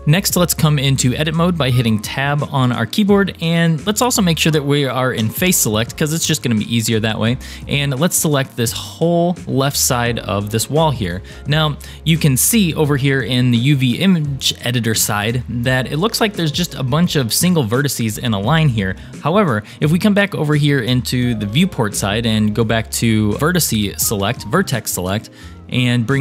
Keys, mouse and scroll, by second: 0.0 click, 1.2 Tab, 5.3 3, 7.3-10.6 drag, 12.1-12.6 scroll up 3, 16.0-16.6 scroll up 5, 23.8 1, 25.1-26.2 scroll up 2.